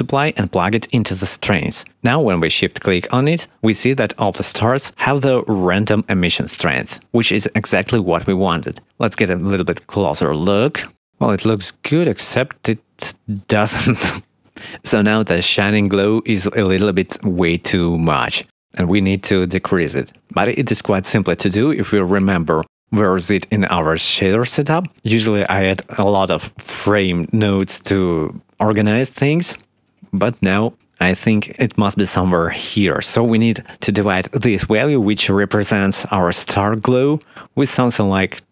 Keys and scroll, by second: 32.9 shift+d.